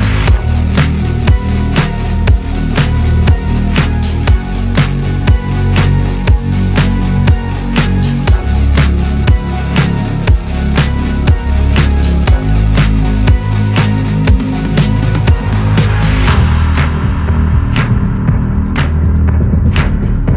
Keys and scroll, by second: 0.7 ctrl+space, 5.3 ctrl+space.